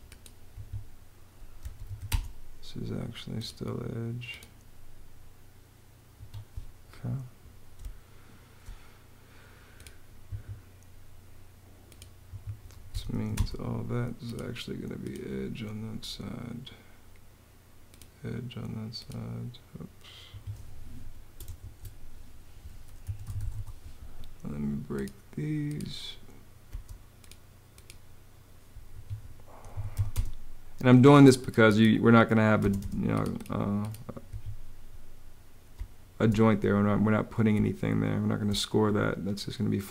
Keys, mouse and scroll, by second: 0.2 Escape, 1.1-2.0 typing, 5.8 Escape, 7.5 space, 10.1 Escape, 12.0 Escape, 12.3-13.3 typing, 20.0 ↶, 21.3 super+z, 22.5-23.6 typing, 26.4 space, 28.7 Escape, 29.2-30.1 typing, 32.3 space, 34.0 Escape, 35.4 space, 37.2 space.